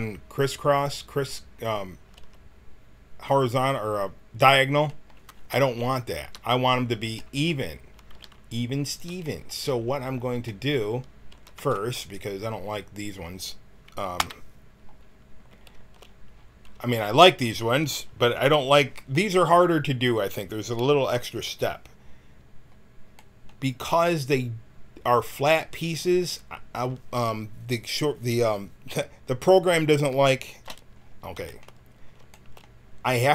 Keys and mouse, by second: 2.2 a, 5.6 ctrl+z, 8.1 g, 11.3 a, 11.5 b, 14.2 KP_1.